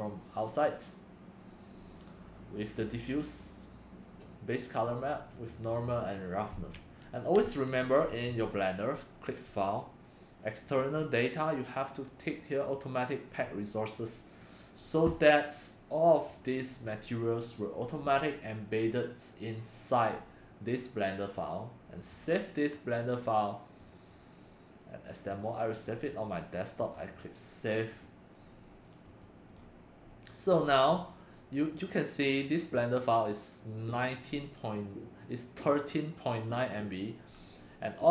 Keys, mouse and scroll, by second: 7.4 click, 8.0-16.2 drag, 16.6-25.1 drag, 25.1 middle click, 25.3-27.0 drag, 28.6-29.5 drag, 31.1 click.